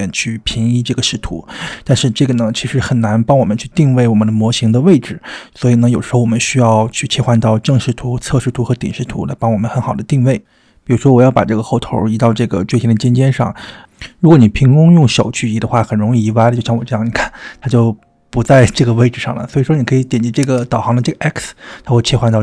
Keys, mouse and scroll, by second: 3.0-3.8 shift+middle drag, 4.1 middle click, 6.1 click, 7.9 g, 10.0 g, 12.7-13.8 middle drag, 14.1 g, 14.8-15.2 middle drag, 15.3-17.5 middle drag, 17.6-18.3 middle drag, 18.4-19.0 drag, 19.0 middle click, 20.4 click, 22.0 g.